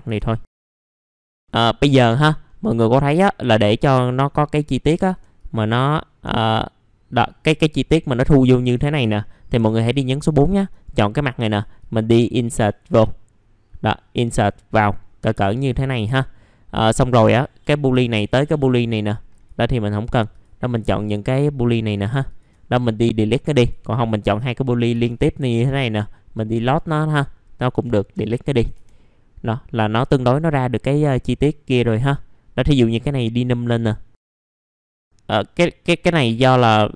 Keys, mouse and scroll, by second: 0.4 scroll down 1, 0.5 scroll up 1, 0.9 click, 1.8 middle click, 2.5-5.0 scroll up 1, 5.0 r, 5.3-7.6 drag, 9.2 middle click, 9.8 click, 10.7 right click, 11.5-15.6 drag, 15.6 click, 15.9 right click, 16.8 click, 17.9 Delete, 18.1 click, 18.3 Delete, 19.3 click, 19.9 ctrl+click, 20.3 ctrl+click, 20.7 ctrl+click, 21.0 ctrl+click, 21.6 ctrl+click, 21.9 ctrl+click, 22.2 ctrl+click, 23.6 click, 24.3 ctrl+click, 25.3 ctrl+z, 25.3 click, 26.6 click, 27.7 Delete, 30.1 middle click, 32.8 click, 33.3 middle click, 34.4 click, 34.6-36.9 middle drag.